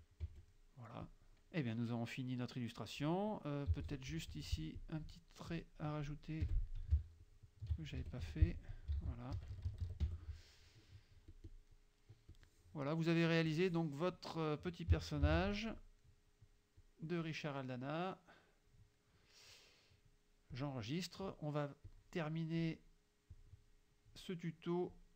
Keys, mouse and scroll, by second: 0.3 F1, 0.6 click, 1.1 click, 3.8 z, 3.9 click, 4.3 F2, 4.8 click, 5.6 click, 6.5 F6, 7.2 shift+click, 8.1 shift+F1, 8.4 shift+F2, 9.1 ctrl+s, 9.4 ctrl+KP_Subtract, 10.1 ctrl+F1, 10.8 middle click, 11.4 click, 12.3 click, 13.5 click, 14.4 click, 15.3 ctrl+g, 16.1 middle click, 16.8-18.9 drag, 19.0 middle click, 20.6 click, 21.1 middle click, 22.0 click, 22.6 click, 23.4 click, 25.0 click.